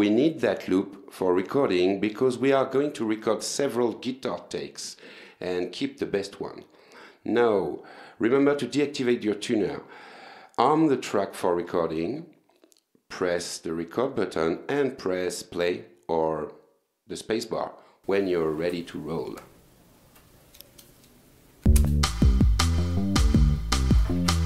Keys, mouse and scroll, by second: 7.4 click, 11.3 click, 14.1 click, 18.7 click.